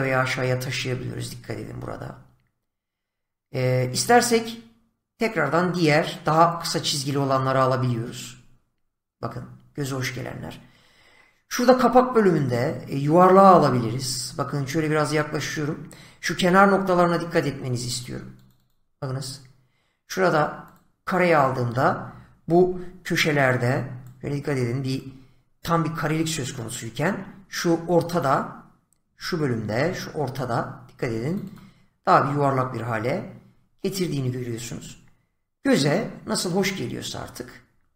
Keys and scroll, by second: 16.2 <, 22.5 <, 29.4 <.